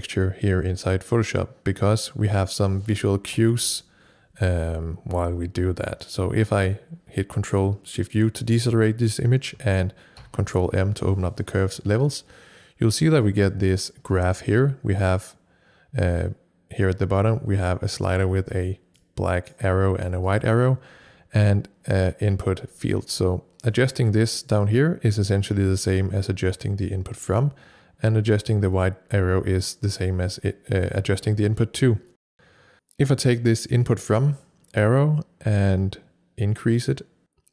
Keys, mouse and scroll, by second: 3.1 Return, 3.1 click, 3.3 ctrl+shift+u, 9.7 ctrl+shift+u, 9.7 click, 10.2 ctrl+m, 13.3 click, 19.0-23.2 drag, 19.1 ctrl+m, 23.8-27.1 drag, 32.7-37.5 drag.